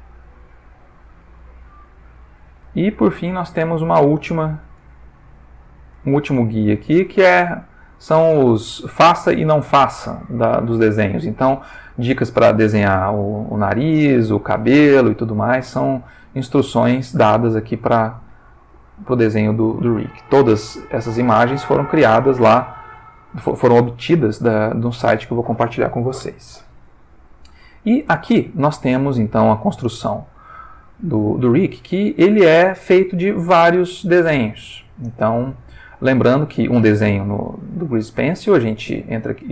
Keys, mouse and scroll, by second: 0.3 click, 1.9-2.6 ctrl+shift+middle drag, 2.8-3.9 ctrl+shift+middle drag, 3.9-4.8 ctrl+shift+middle drag, 5.0-6.1 ctrl+shift+middle drag, 6.2 ctrl+shift+middle click, 7.2 ctrl+shift+middle click, 16.4 ctrl+middle click, 18.1 shift+middle click, 18.6 shift+middle click, 18.9-19.4 shift+middle drag, 20.3 click, 21.6-22.2 ctrl+middle drag, 22.4-23.1 ctrl+shift+middle drag, 23.2-24.0 ctrl+shift+middle drag, 24.1 ctrl+shift+middle click, 25.0-25.6 ctrl+middle drag, 25.6-26.1 ctrl+scroll up 1, 27.4-28.2 ctrl+middle drag, 28.3 ctrl+shift+middle click, 31.1-32.8 drag, 34.8-36.2 drag.